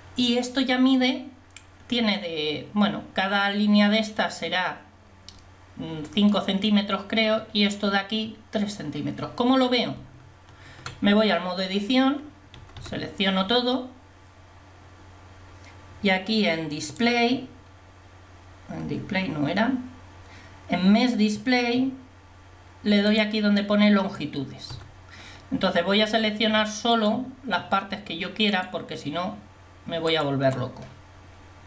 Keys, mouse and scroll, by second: 10.0 Tab, 12.6 a, 13.0 a, 16.9-17.4 scroll down 1, 17.4-18.9 scroll down 1, 23.2-24.8 drag, 24.8 a, 27.1 click.